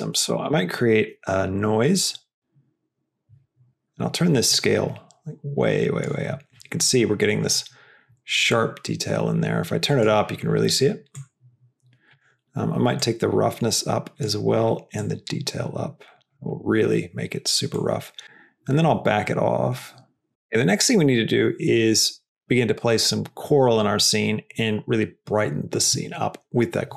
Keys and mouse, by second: 0.2 shift+a, 4.4-6.0 drag, 8.4-10.0 drag, 11.1-12.1 drag, 12.9-14.2 drag, 15.0-16.3 drag, 17.6-20.3 drag.